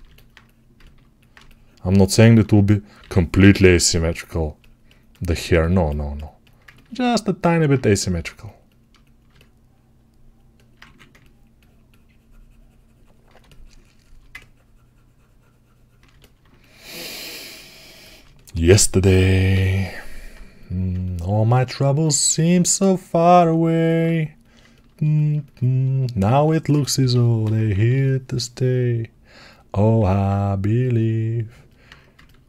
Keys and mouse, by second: 1.7-18.0 alt+drag, 2.1 1, 2.9 g, 3.2 [, 3.4 [, 10.7 1, 18.0-23.9 alt+right drag, 19.4 g, 26.3 alt+q, 26.8 g, 27.3 ], 29.8-32.4 alt+right drag.